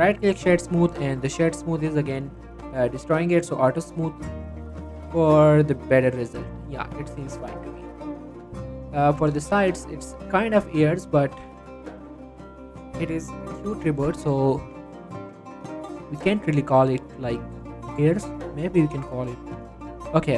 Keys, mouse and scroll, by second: 0.3 click, 0.5-0.9 scroll down 1, 0.9-1.3 scroll up 1, 2.5 click, 3.9 middle click, 4.3-4.8 scroll down 1, 4.8 middle click, 4.9 scroll up 1, 5.9 click, 6.7 right click, 7.0 scroll down 1, 7.1 middle click, 7.4 click, 7.7 middle click, 8.3 shift+middle click, 8.8 scroll up 2, 9.1 middle click, 10.1 click, 10.6 Tab, 11.7 click, 12.7 shift+s, 14.3 scroll up 1, 14.6 Tab, 15.0 shift+middle click, 15.9 shift+a.